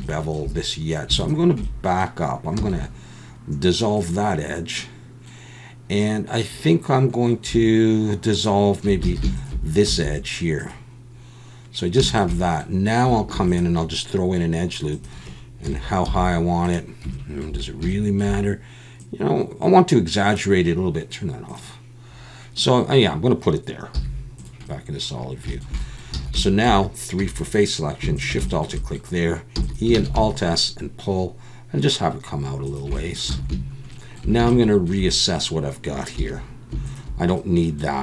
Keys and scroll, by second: 2.6 x, 9.0 alt+a, 9.9 x, 13.3 ctrl+r, 15.6 KP_1, 16.1 z, 23.9 z, 26.2 alt+a, 27.2 3, 29.6 e, 29.9 alt+s, 33.4 alt+a, 36.2 2.